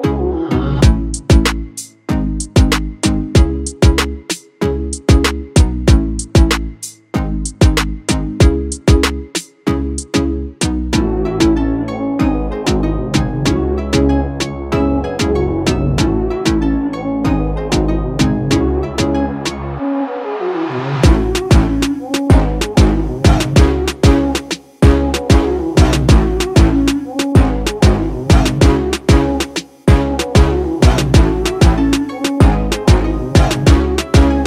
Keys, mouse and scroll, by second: 17.4 click.